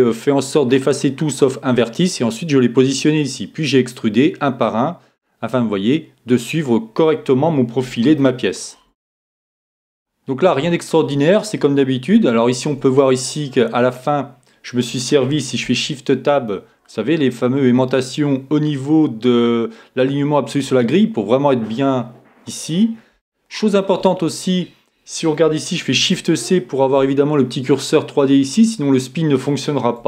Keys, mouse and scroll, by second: 0.2-15.6 middle drag, 0.2-2.0 scroll up 1, 2.0-2.7 scroll up 1, 2.7-4.8 scroll up 1, 4.8-5.1 scroll up 1, 6.7 scroll up 1, 15.6 shift+Tab, 22.6-26.9 middle drag, 25.9 shift+c.